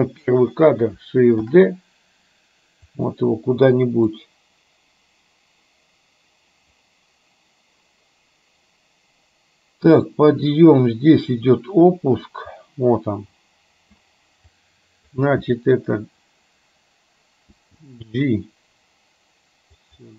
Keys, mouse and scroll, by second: 1.5 shift+d, 4.3-14.0 drag, 14.7-15.2 drag, 17.7 g.